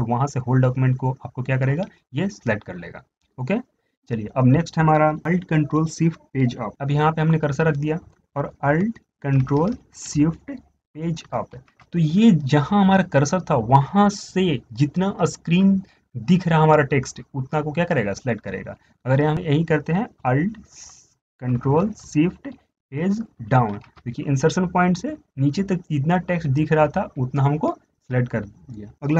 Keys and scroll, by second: 11.6 ctrl+alt+shift+Page_Up, 23.7 ctrl+alt+shift+Page_Down.